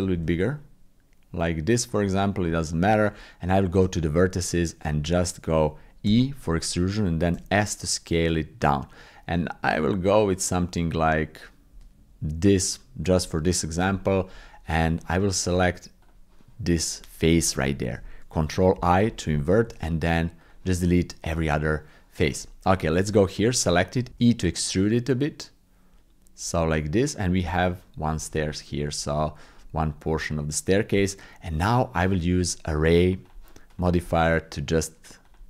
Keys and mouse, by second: 0.1 s, 2.5 shift+click, 3.1 Tab, 6.0 e, 14.0 shift+click, 15.0 Tab, 16.0 click, 18.7 ctrl+i, 19.6 x, 21.6 click, 22.8 shift+click, 23.4 click, 23.9 w, 24.1 e, 27.4 middle click, 28.1 Tab, 28.5 click, 29.8 click, 31.0 click, 31.8 click, 34.2-35.4 drag.